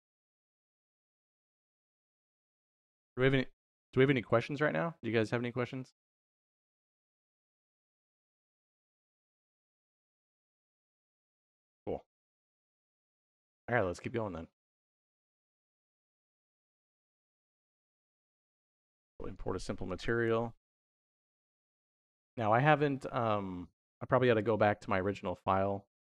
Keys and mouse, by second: 13.0 middle click, 14.3 middle click, 16.1-21.8 drag.